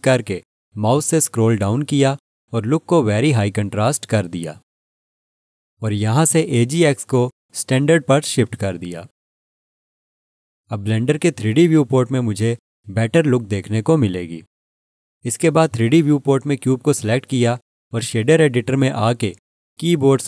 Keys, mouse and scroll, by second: 0.0 click, 0.4-3.3 scroll down 1, 3.3-5.1 scroll down 1, 5.1 click, 17.4 click.